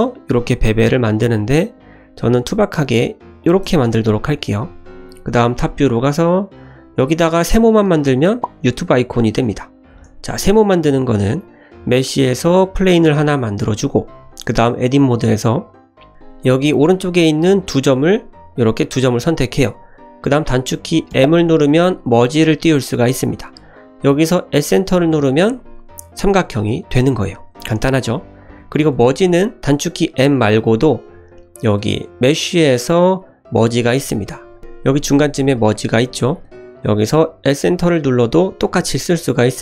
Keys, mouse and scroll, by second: 3.6 Tab, 4.0 shift+middle drag, 4.5-4.9 middle drag, 5.6 shift+middle click, 6.2-6.5 scroll up 1, 8.5 scroll down 1, 8.6-9.2 middle drag, 9.9 shift+a, 12.8-13.3 scroll down 2, 13.3 g, 14.1 scroll up 1, 14.6 Tab, 15.0 shift+middle click, 16.1 1, 16.7 click, 17.4 shift+click, 18.1 click, 18.4 click, 18.9 shift+click, 21.0 m, 31.9-39.6 drag.